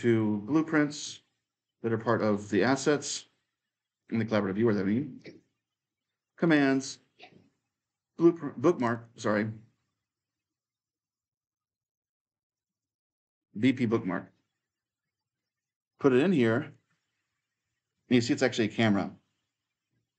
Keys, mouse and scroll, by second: 0.0-8.3 drag, 8.6-10.8 drag, 12.3-14.6 drag, 15.4-20.1 drag.